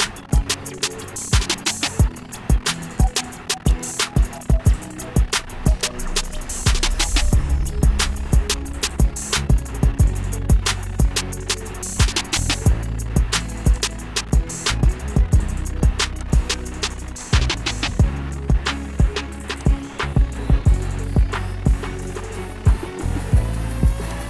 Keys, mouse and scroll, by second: 0.7 click, 4.1 click, 6.0 click, 7.5 click, 7.8 scroll, 8.0-8.9 scroll down 8, 8.9-10.7 scroll up 17, 10.7-11.4 scroll, 11.6-12.2 shift+scroll, 12.5-13.4 shift+scroll, 14.1 click, 14.4 shift+scroll, 16.5 click, 18.0 click, 20.0 click.